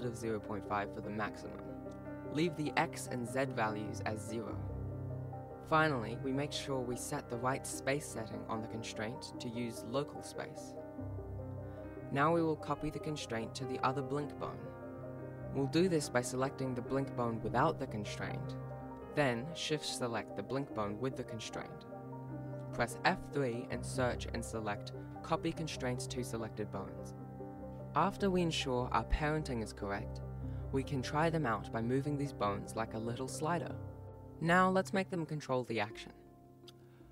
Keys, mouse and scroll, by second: 2.3 click, 8.6 click, 9.6 click, 11.7 g, 17.8 shift+right click, 18.0 right click, 19.2 shift+right click, 20.2 F3, 25.4 Down, 25.6 Down, 26.2 Down, 27.7 alt+a, 27.7 alt+g, 27.7 right click, 27.8 ctrl+s, 27.9 right click, 28.1 ctrl+z, 28.2 Tab, 28.4 shift+right click, 28.5 shift+right click, 28.6 ctrl+p, 29.1 ctrl+Tab, 29.2 right click, 29.5 s, 29.8 alt+g, 30.2 r, 30.8 right click, 32.7 ctrl+z, 34.4 ctrl+s, 35.2 alt+a, 36.3 scroll down 1, 36.4 click.